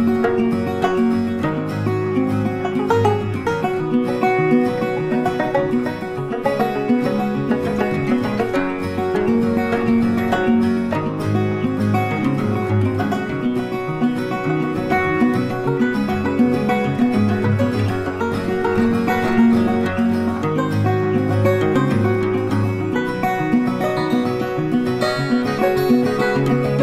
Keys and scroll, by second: 11.8 ctrl+z, 14.9 ctrl+z, 15.7 ctrl+z.